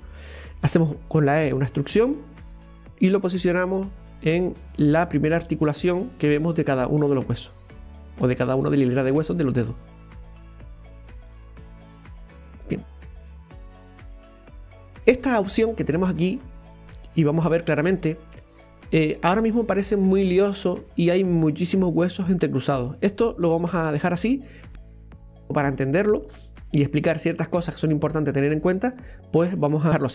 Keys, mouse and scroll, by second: 1.5 e, 4.7 right click, 4.9 e, 6.8 right click, 7.1 e, 9.1 right click, 9.3 e, 11.0 right click, 11.2 e, 29.5 right click, 29.9 g.